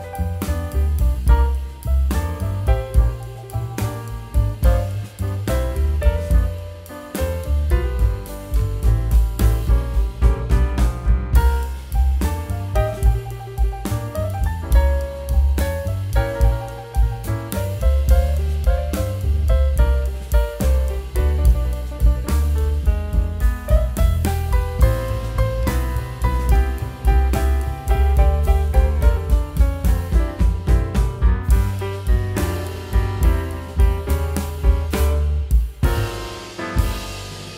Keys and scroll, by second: 6.2 super+z, 8.9 super+e, 10.4 alt+shift+super+n, 11.2 super+z, 13.7 alt+shift+super+n, 14.8 super+z, 16.2 super+z, 17.5 super+z, 18.8 super+z, 19.4 super+z, 20.0 super+z, 22.1 super+z, 22.5 ↻, 23.6 super+x, 23.9 super+z, 24.0 super+d, 24.2 super+x, 25.5 super+x, 26.3 super+x, 27.4 super+x, 28.0 super+x, 28.2 super+d, 28.3 super+x, 29.2 super+x, 29.9 super+x, 30.9 super+x, 31.6 super+x, 33.5 super+-, 34.3 alt+shift+super+n.